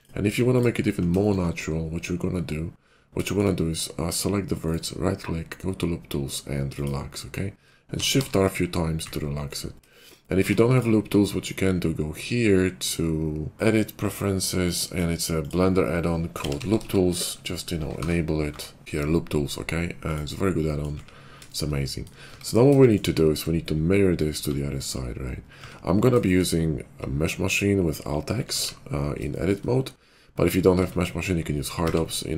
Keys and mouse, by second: 0.4 ctrl+click, 3.3 shift+click, 3.4-4.6 middle drag, 7.9 shift+r, 8.1 shift+r, 9.8-20.8 shift+drag, 10.3 Tab, 13.6-20.8 middle drag, 13.6-20.8 right drag, 22.2 Tab, 24.3 a, 25.5 Tab, 28.6 alt+x, 30.7 Tab, 31.7 alt+x.